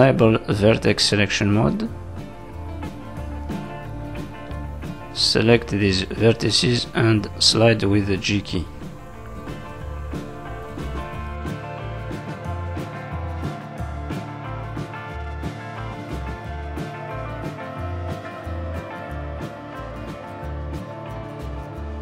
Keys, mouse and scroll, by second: 0.2 z, 1.1-1.8 scroll up 2, 4.8 click, 6.5 click, 7.5 g, 8.4 click, 8.9 g, 9.3 click, 10.0 click, 10.3 g, 11.7 click, 11.9 g, 12.8 click, 13.0 g, 14.8 click, 15.0 g, 16.1 click, 16.4 click, 16.4 g, 18.0 click, 20.4 click, 20.6 g.